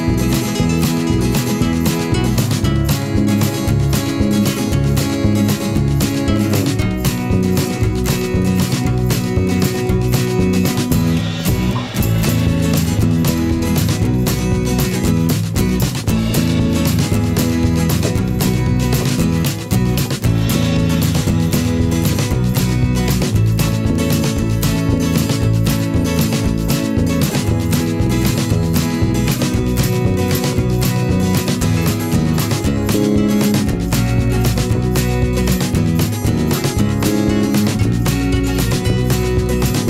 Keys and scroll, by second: 18.6 ctrl+alt+z.